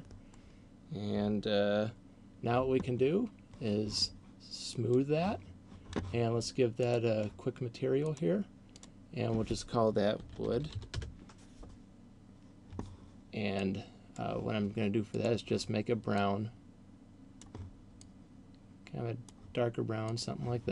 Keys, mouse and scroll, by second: 4.8 click, 6.8 click, 8.3 click, 8.8 click, 13.5 click, 15.3 click.